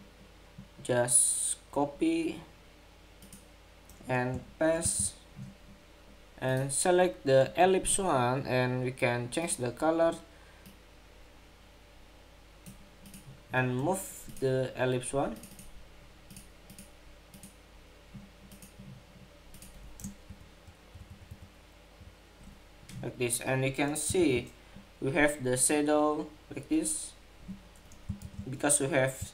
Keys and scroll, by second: 4.5 super+v, 23.9 super+=, 28.0 super+-.